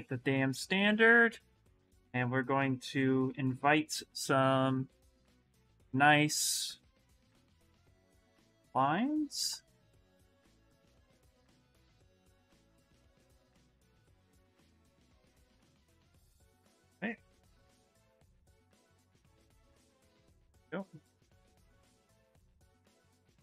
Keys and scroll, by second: 0.0-0.3 typing.